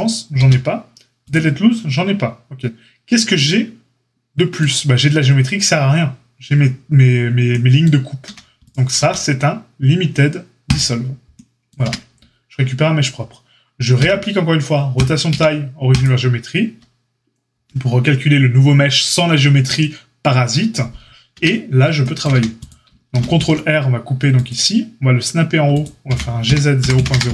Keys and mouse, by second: 0.3 q, 8.2 a, 8.9 q, 11.8 Tab, 13.9 q, 15.2 q, 21.3 Tab, 22.3 a, 23.2 ctrl+r, 26.0 g.